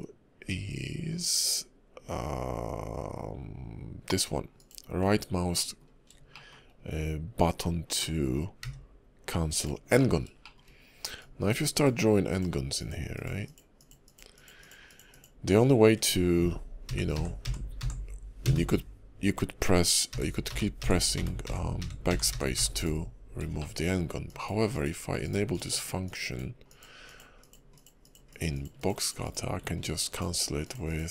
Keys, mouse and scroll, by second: 5.5 middle click, 5.9 scroll down 2, 6.3 shift+middle click, 8.0 middle click, 9.0 d, 9.9 middle click, 10.4 shift+middle click, 11.2 click, 18.5 Delete, 23.5 shift+middle click, 24.3 ctrl+click, 25.5 click, 26.0 ctrl+click, 30.0 ctrl+click.